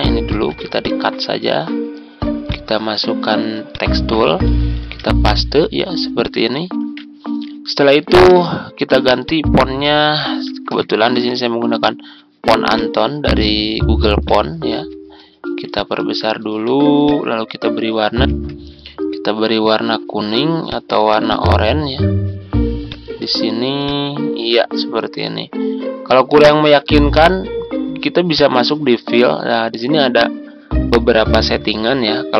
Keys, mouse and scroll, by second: 0.2 ctrl+x, 0.7 click, 4.8 ctrl+v, 6.2 click, 6.8 ctrl+a, 9.2 click, 10.4-11.6 typing, 12.7 click, 15.7 ctrl+click, 17.0 click, 18.3 Tab, 20.6-32.3 drag.